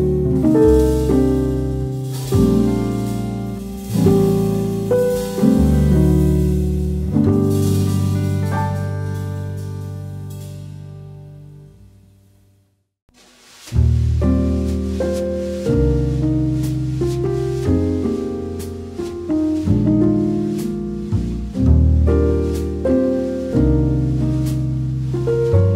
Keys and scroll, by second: 13.2 x, 17.5 v, 21.5 e, 25.1 shift+v.